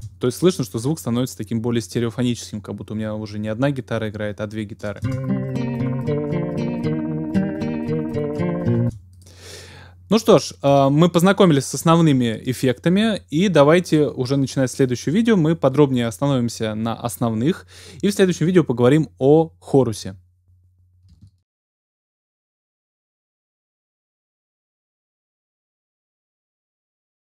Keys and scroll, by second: 5.1 space, 8.8 space.